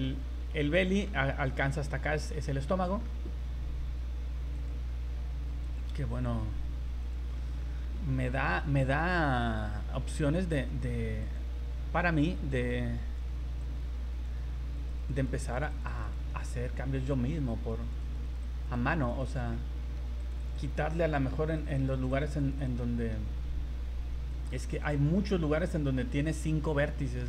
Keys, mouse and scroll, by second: 0.6 middle click, 1.9 middle click, 4.5 click, 5.6 click, 6.1 click, 7.4 middle click, 7.7 scroll down 1, 8.1 scroll up 3, 10.2 click, 11.2 click, 11.7-12.1 scroll up 4, 12.5 click, 13.6 click, 14.8 click, 15.0 click, 15.2 click, 15.4 click, 15.5 click, 15.7 click, 15.9 click, 16.1 click, 16.3 middle click, 17.7 click, 18.1 click, 18.3 click, 18.4 click, 18.8 click, 19.2 click, 19.3 click, 19.5 middle click, 20.2 click, 20.4 click, 20.6 click, 20.9 middle click, 21.6 click, 21.7 click, 21.9 click, 22.2 click, 22.4 click, 22.7 click, 22.8 middle click, 22.9 middle click, 23.9 v, 24.3 right click, 24.7 right click, 26.2 middle click.